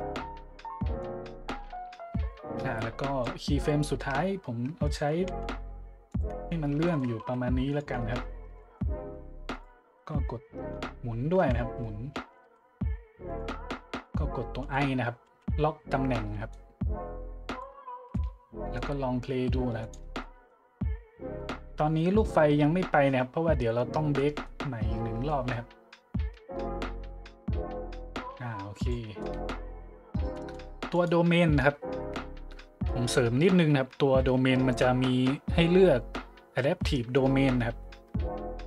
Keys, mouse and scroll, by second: 1.0-3.2 drag, 3.8-4.2 shift+drag, 4.8-5.2 shift+drag, 5.2 g, 6.1-6.4 drag, 6.3 `, 6.9 shift+click, 7.2 g, 7.7-8.0 drag, 8.0 `, 8.6-8.9 shift+middle drag, 9.0 g, 9.5-9.8 drag, 10.7 `, 11.4 `, 12.4 r, 13.3 click, 14.6 i, 15.3 i, 16.5-17.6 drag, 18.1-18.7 drag, 19.8 click, 20.2-20.5 drag, 24.1-24.5 middle drag, 25.3 middle click, 28.7 click, 30.9 click, 32.1 middle click, 33.8 middle click, 33.9 middle click, 38.6 middle click.